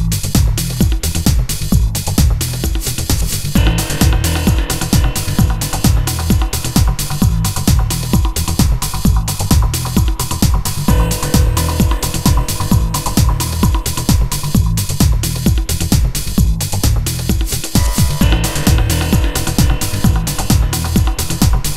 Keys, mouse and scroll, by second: 3.3 i, 4.2-7.3 right drag, 8.2 i, 13.0 shift+a, 15.3 s, 17.6 s, 21.5 Tab.